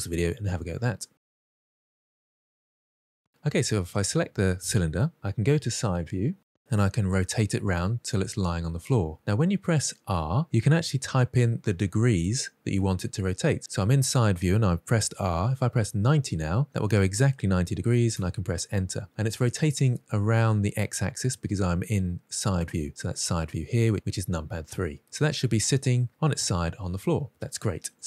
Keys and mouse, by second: 6.0 KP_3, 6.9 r, 15.7 9, 15.8 0, 17.8 Return, 24.8-25.7 middle drag.